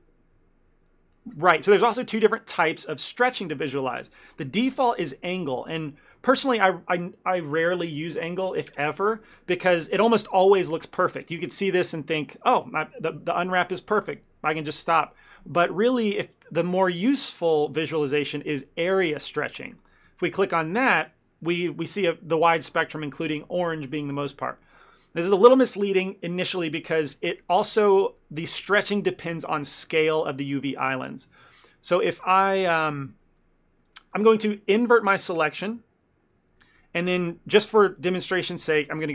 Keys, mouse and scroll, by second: 5.0 shift+middle click, 16.8 click, 27.4 ctrl+middle click, 31.6 ctrl+middle click, 32.0 middle click, 32.3 shift+middle click, 32.7 middle click, 33.1 middle click, 33.5 middle click, 35.7 ctrl+i, 36.9 shift+middle click.